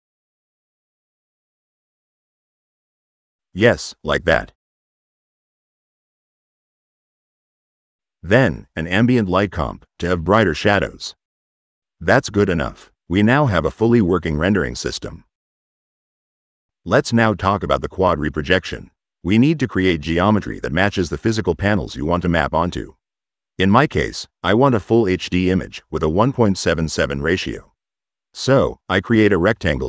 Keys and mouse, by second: 0.4 click, 1.2 click, 2.0 click, 4.8 click, 5.3 right click, 5.4 click, 6.2 click, 7.8 click, 9.2 click, 10.9 click, 13.4-15.0 drag, 18.4-18.7 drag, 19.2 click, 25.5 click, 26.4 click, 27.1 click, 27.8-28.8 typing, 28.9 click.